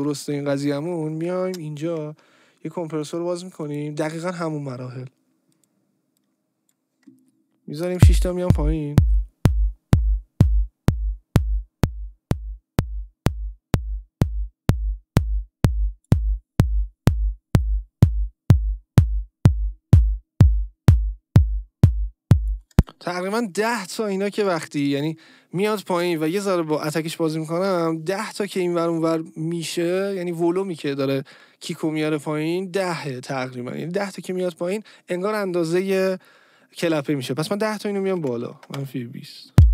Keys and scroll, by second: 1.5 ctrl+g, 7.9 space, 22.7 space, 38.7 Return, 39.5 space.